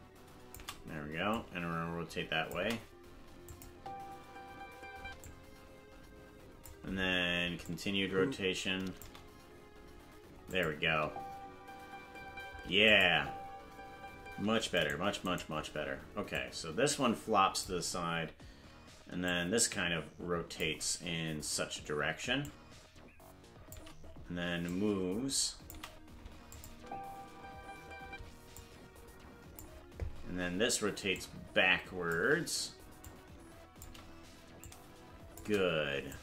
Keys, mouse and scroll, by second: 1.3-2.5 drag, 3.5 click, 3.7 space, 5.2-6.7 drag, 5.2 space, 7.6-9.0 drag, 10.5 click, 10.8 space, 12.5 space, 12.9 click, 13.1 space, 14.8 right click, 14.8 space, 16.3-17.7 drag, 16.3 right click, 19.3-20.6 drag, 22.4-23.8 shift+drag, 24.7-25.7 drag, 26.5 click, 26.7 space, 28.6-29.6 drag, 28.6 space, 31.1-32.2 drag, 33.0 click, 34.6 click, 36.1-36.2 drag.